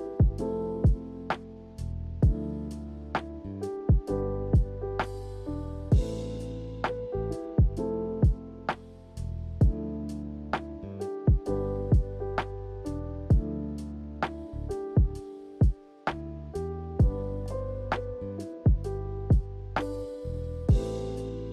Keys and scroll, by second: 16.8 b, 20.7 b.